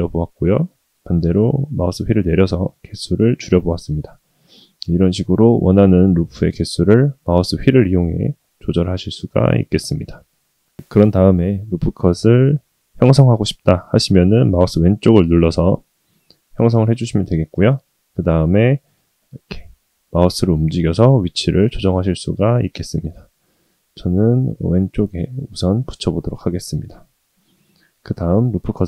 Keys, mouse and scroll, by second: 28.4 ctrl+r.